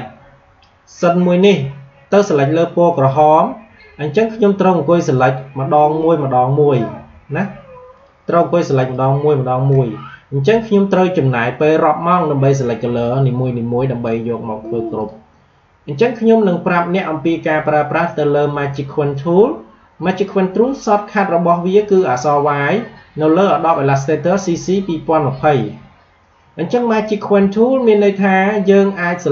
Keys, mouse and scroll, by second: 2.8 click, 5.1 shift+click, 7.8 shift+click, 14.9 click.